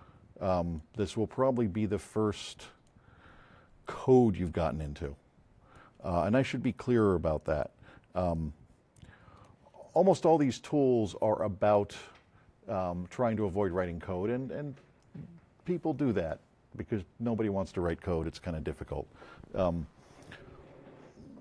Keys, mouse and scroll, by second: 5.0 click, 10.4 click, 12.0-12.9 drag, 15.0-16.4 drag.